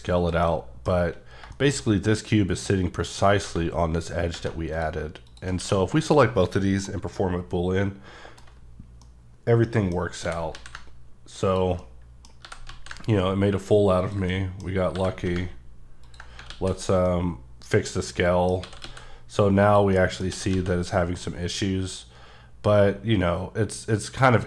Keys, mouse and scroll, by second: 0.1 click, 0.4 middle click, 3.0 click, 4.7 click, 5.2 click, 5.6 q, 6.0 click, 6.8 middle click, 8.5 scroll up 1, 9.0 middle click, 9.9 scroll down 1, 10.2 g, 10.5 z, 11.4 click, 11.8 middle click, 12.2 scroll down 1, 12.4 g, 12.6 z, 14.0 click, 14.3 middle click, 14.9 g, 16.0 ctrl+click, 16.4 s, 17.0 middle click, 18.6 s, 18.8 x, 19.6 click, 19.9 middle click, 20.1 scroll down 1, 20.3 s, 20.5 z, 24.3 click.